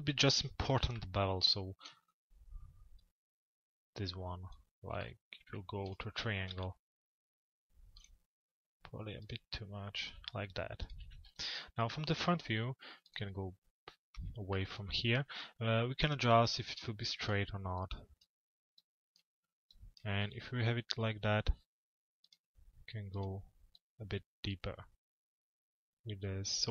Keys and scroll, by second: 0.3 z, 10.8-11.7 typing.